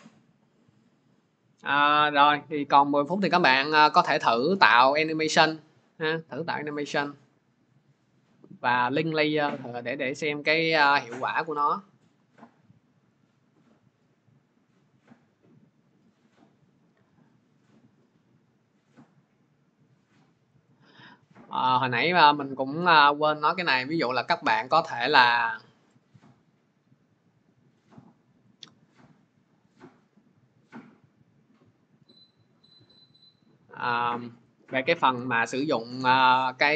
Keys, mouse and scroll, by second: 4.6-9.6 drag, 11.5-16.1 drag, 17.3 click, 20.4 click, 20.6 click, 25.1 click, 26.6 click, 27.6 click, 28.4 click, 30.7 click, 32.8 click, 34.1 shift+click, 35.0 Delete, 36.0 click, 36.6-36.7 scroll.